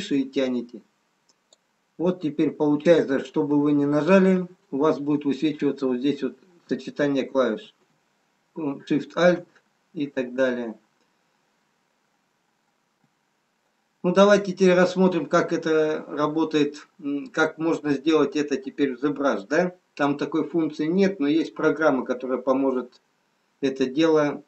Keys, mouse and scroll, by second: 1.3 click, 3.6 b.